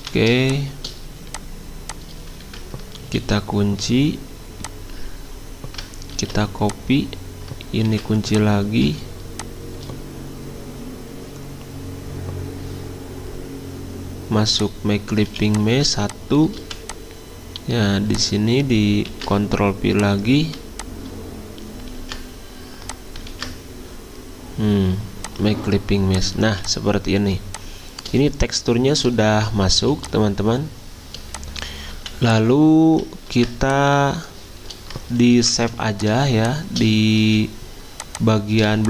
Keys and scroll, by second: 2.4 ctrl+z, 3.2 ctrl+2, 6.1 ctrl+c, 7.9 ctrl+2, 15.2 z, 16.6 v, 19.1 ctrl+f, 22.0 ctrl+z, 23.3 ctrl+z, 26.4 z, 29.8 z, 31.9 v, 33.3 ctrl+s, 35.4 ctrl+alt+2, 37.2 z.